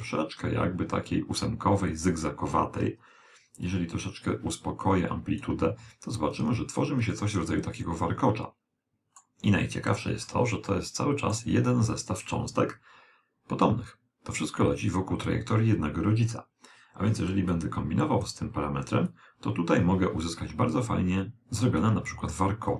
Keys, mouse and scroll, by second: 3.7 click, 6.5-9.1 middle drag, 9.7-12.4 middle drag, 17.6-20.9 drag.